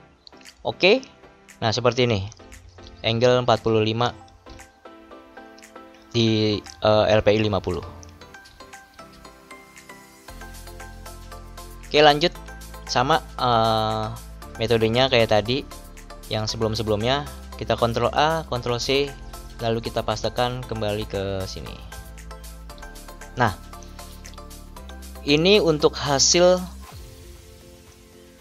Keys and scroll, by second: 2.4 ctrl+=, 7.6 ctrl+-, 17.8 ctrl+a, 18.8 ctrl+c, 22.7 ctrl+v, 26.2 ctrl+=.